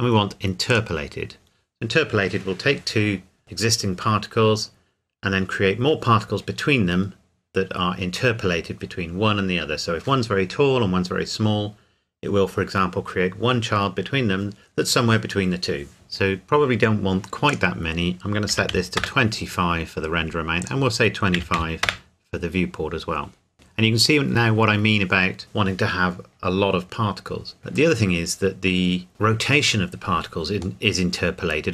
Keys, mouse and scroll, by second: 0.7 click, 17.5 click, 18.5 KP_2, 18.7 KP_5, 19.0 KP_Enter, 20.6 click, 21.4 KP_2, 21.6 KP_5, 21.8 KP_Enter, 23.5-24.3 scroll up 1, 27.6-27.9 scroll down 1, 30.8 middle click.